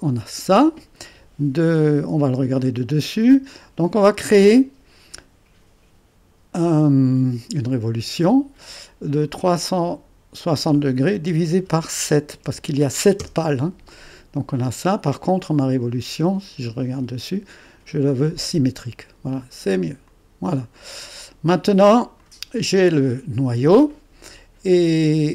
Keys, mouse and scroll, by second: 0.0-1.9 drag, 1.9 2, 2.6-3.8 drag, 7.7 click, 9.3-10.5 drag, 12.5 7, 13.2 Return, 15.2 click, 15.6 click, 17.0-24.8 drag.